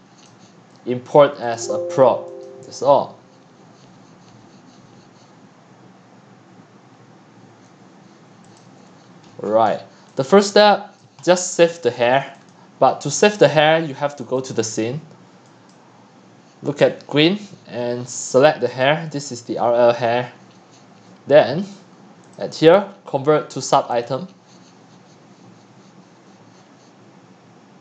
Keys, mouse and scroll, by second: 0.7-1.2 drag, 2.5 click, 8.6 click, 8.9-9.4 scroll down 14, 9.4 scroll up 8, 9.7-10.0 scroll down 1, 9.8-11.7 typing, 11.0 click, 11.2-11.7 scroll down 8, 12.0-13.6 drag, 14.4 click, 17.9-18.4 drag, 18.9 click, 19.6-20.2 drag, 21.0 click, 21.6 click, 22.2 click, 23.2-23.5 drag, 24.1 click, 26.8 middle click, 26.8 scroll down 1.